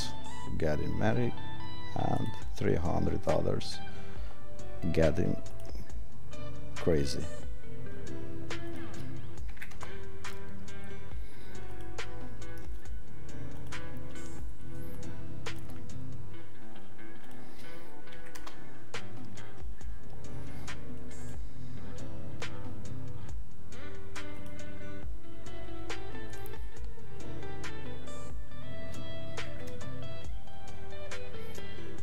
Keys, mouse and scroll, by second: 5.6 click, 8.6 click, 11.7 click, 21.1 click.